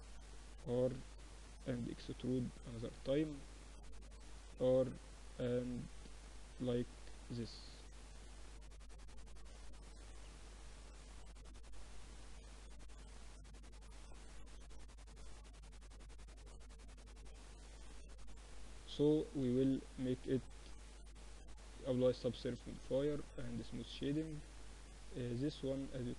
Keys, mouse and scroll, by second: 0.6 r, 1.9 e, 4.2 r, 5.5-7.3 drag, 7.1 a, 10.6 click, 10.7-12.3 right drag, 11.2 a, 11.7 c, 13.3 g, 15.3 a, 15.5-18.0 drag, 16.2-17.3 right drag, 17.1 Tab, 18.8 ctrl+2, 19.2 z, 19.3-22.3 middle drag, 20.4 y, 21.1 Escape, 21.6 t, 22.8-24.8 drag, 23.1 t, 24.8 Tab.